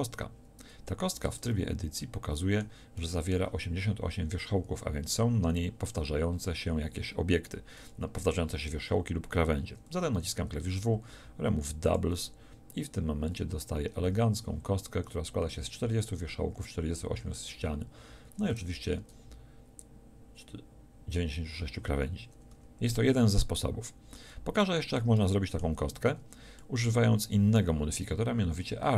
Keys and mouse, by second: 1.3 Tab, 10.1 w, 13.8 Tab, 18.7 Tab, 22.5 a, 23.1 Tab, 28.7-28.9 middle drag.